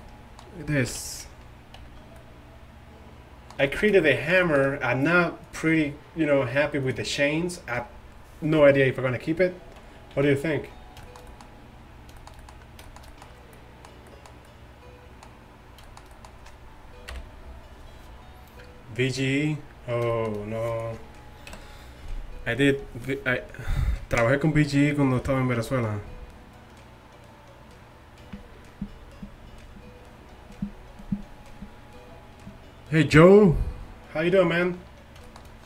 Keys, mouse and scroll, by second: 0.9 alt+h, 1.8 a, 5.5-9.7 middle drag, 9.7 z, 10.2 z, 17.2 KP_1, 20.8 right click, 21.6 KP_Decimal, 21.7 right click, 34.6-34.9 middle drag.